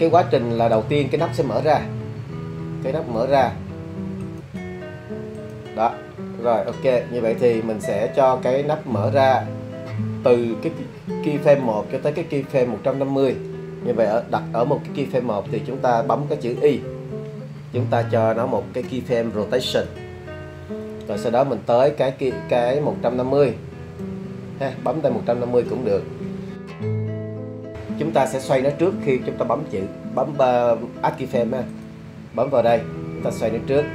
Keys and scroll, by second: 16.9 i.